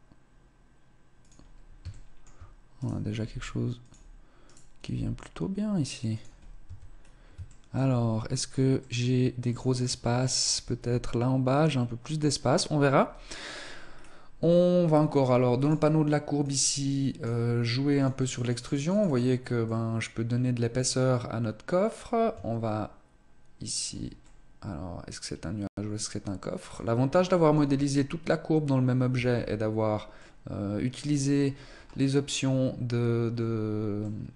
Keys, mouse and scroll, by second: 1.9 shift+middle click, 2.6 right click, 3.0 g, 4.3 right click, 4.7 g, 6.3-7.5 scroll down 4, 6.3 Tab, 7.1 shift+middle click, 8.7 middle click, 9.9 scroll down 1, 10.7-11.8 scroll up 3, 12.3-13.2 scroll down 1, 13.8 scroll down 2, 15.5 click, 16.3 click, 17.9 click, 18.2 click, 18.4 click, 18.6 click, 18.8 click, 19.0 click, 19.5 click, 24.1 middle click, 26.9 middle click, 27.5 Tab, 28.9 Tab, 29.9 middle click, 31.2-32.0 scroll up 8, 33.8 middle click.